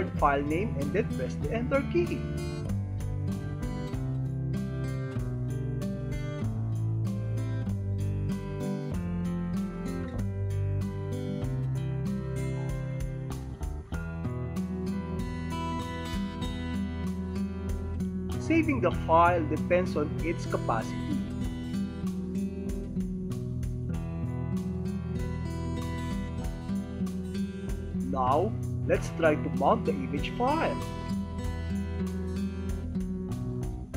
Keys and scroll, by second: 4.1 super+2, 5.4 alt+d, 7.4 ctrl+Tab, 9.4 space, 11.4 F2, 13.4 ctrl+c, 15.4 super+5, 17.4 ctrl+v, 21.0 alt+s, 32.0 super+d.